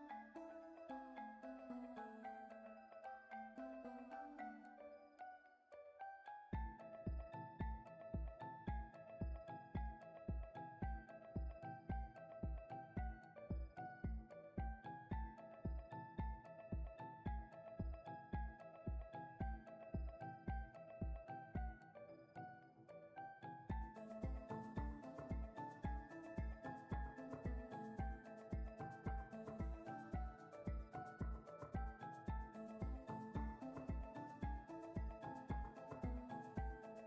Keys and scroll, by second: 0.2 Tab, 7.5 ctrl+KP_1, 10.1 g, 11.9 g, 16.2 Tab.